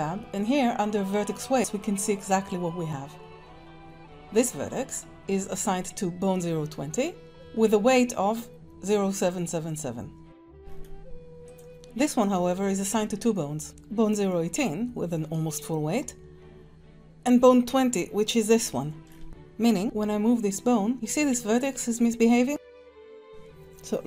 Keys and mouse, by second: 10.2 middle click, 11.5 click, 18.9 Tab, 19.5 click, 19.9 ctrl+Tab, 20.9 r, 23.3 Tab.